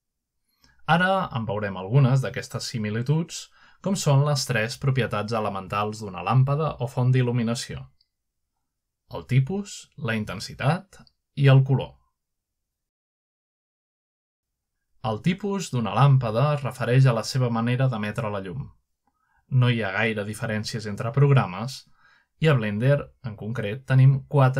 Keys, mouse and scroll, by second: 0.6 shift+middle click, 1.4 shift+middle click, 3.2 shift+middle click, 4.4-6.1 middle drag, 10.7-11.3 middle drag, 15.4-16.3 scroll up 2, 18.3-18.7 middle drag, 21.5 middle click, 21.8-22.2 middle drag.